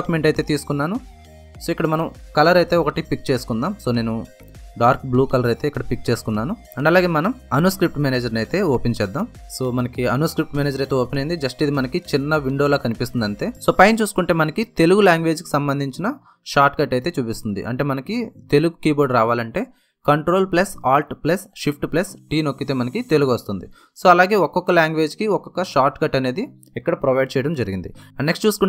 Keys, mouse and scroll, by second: 0.9 click, 3.5 click, 5.7 BackSpace, 6.7 click, 8.4 Return.